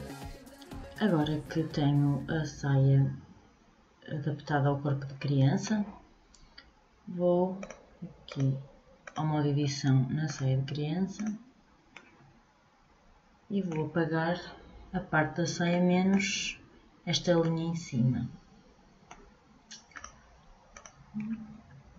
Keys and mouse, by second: 21.4-21.9 middle drag.